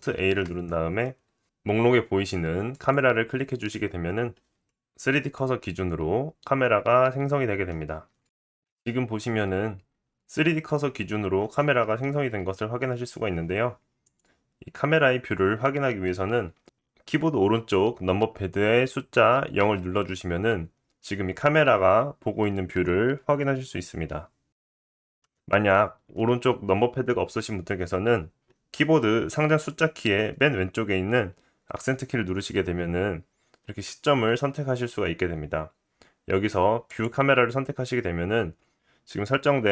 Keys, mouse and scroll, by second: 0.1 shift+a, 6.0 middle click, 8.6-9.6 middle drag, 9.6-10.5 drag, 10.5 middle click, 11.3-14.1 right drag, 12.4 g, 14.1-39.7 middle drag, 19.6 KP_0.